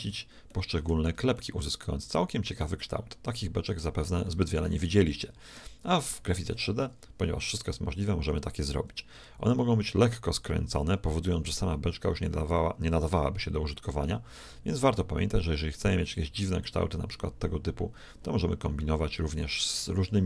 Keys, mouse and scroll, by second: 2.2-3.3 middle drag, 4.3-6.9 middle drag, 7.6-9.4 drag.